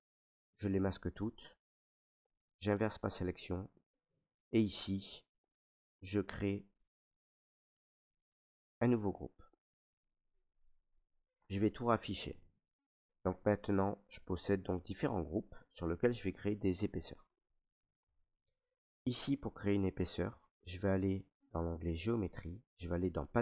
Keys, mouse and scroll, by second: 0.3 click, 0.9 click, 2.2 right click, 2.9 click, 4.6 right click, 7.1 right click, 8.0 ctrl+w, 10.0-11.4 right drag, 11.4 click, 13.1 alt+right click, 13.7 ctrl+right click, 14.3 alt+right click, 15.2 right click, 16.7 right click, 17.3 alt+right click, 19.5 right click, 20.3 alt+right click.